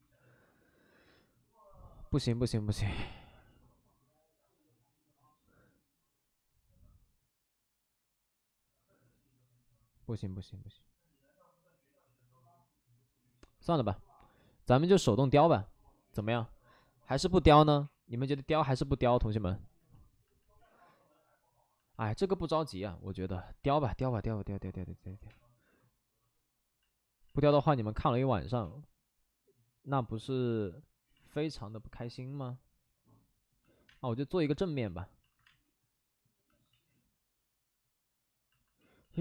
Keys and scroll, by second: 14.0 2, 18.9 space, 25.1-25.9 typing, 27.2 ctrl+z, 27.5 space, 28.6 space, 33.3 space, 33.8 space, 35.2 alt+s, 35.4 space, 36.7 ctrl+z, 38.9 ctrl+z, 38.9 ctrl+z, 39.1 ctrl+z.